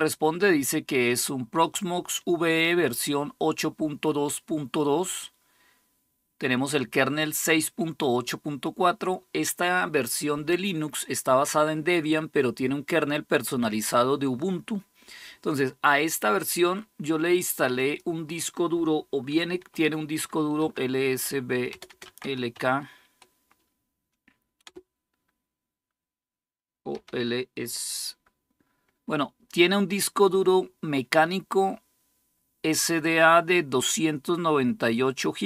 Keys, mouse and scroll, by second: 17.5 click, 20.2-22.8 typing, 24.4 Return, 26.5-27.2 typing, 30.1-35.1 scroll up 1, 30.1 typing, 35.2-35.4 drag.